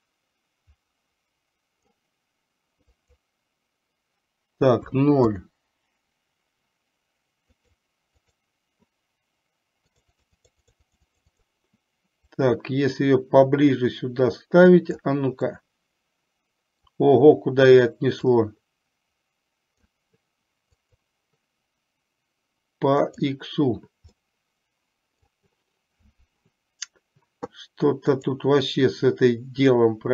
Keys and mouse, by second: 3.1-5.5 drag, 7.7 click, 10.0-11.5 drag, 12.5-15.2 drag, 15.6-16.8 middle drag, 18.6-20.0 drag, 20.8-23.5 drag, 24.3-25.5 middle drag, 28.3-30.1 drag.